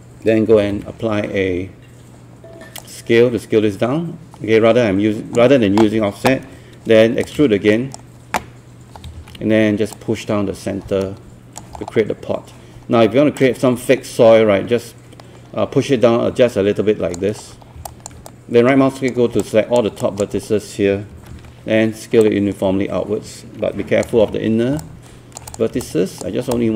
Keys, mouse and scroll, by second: 0.3-1.3 typing, 2.8-5.6 drag, 7.2-8.6 shift+right drag, 9.2 w, 10.0-11.8 drag, 11.8 scroll down 1, 12.2 scroll up 1, 13.4-17.6 drag, 17.7 scroll down 1, 17.9 alt+click, 18.6 right click, 19.4 click, 20.0 alt+click, 20.9-21.8 typing, 22.2-24.6 drag, 24.8 alt+click, 25.8 alt+click, 26.5-26.7 alt+drag.